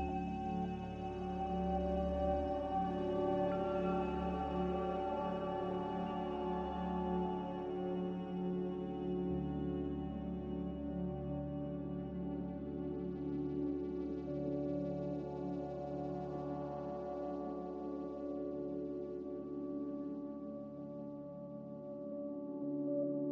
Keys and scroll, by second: 0.0 z, 3.6-4.4 typing, 8.5-9.3 typing, 21.4 F9, 22.5 g.